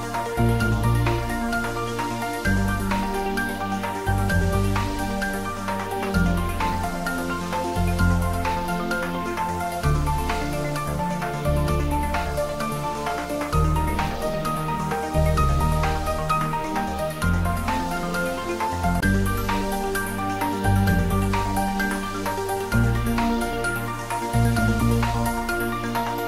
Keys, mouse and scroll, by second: 0.0 scroll down 1, 0.8 click, 1.2 scroll down 1, 1.5-2.1 middle click, 2.1-2.9 scroll up 1, 5.5-6.2 middle click, 6.3 click, 6.8 scroll up 1, 8.2 Tab, 9.4 click, 11.7 2, 12.1 click, 17.7 scroll down 1, 18.0-18.6 middle click, 19.2 ctrl+b, 21.1-22.9 scroll up 1, 24.1 Tab, 24.6-25.8 middle drag.